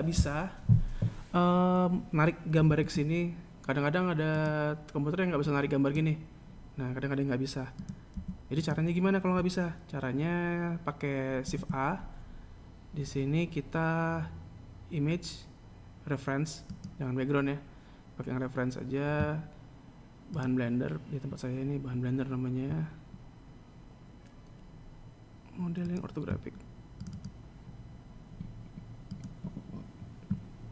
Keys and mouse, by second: 4.6 click, 5.0 x, 8.3 shift+a.